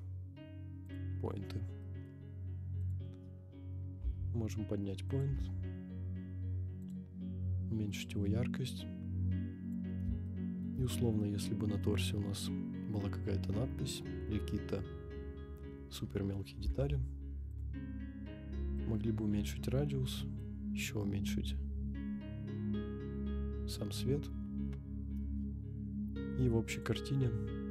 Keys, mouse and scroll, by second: 1.5-1.8 scroll down 3, 1.8 middle drag, 2.8 click, 3.9 g, 4.0 z, 5.2 click, 5.3 g, 5.3 x, 7.0 click, 7.1 scroll up 2, 8.0-9.8 drag, 10.2-10.7 shift+middle drag, 10.8-11.2 scroll up 4, 11.2-11.8 middle drag, 14.1 scroll down 2, 16.6 g, 16.7 y, 17.6 click, 18.7-20.2 drag, 20.4-23.9 drag, 25.2 KP_0, 26.7 click.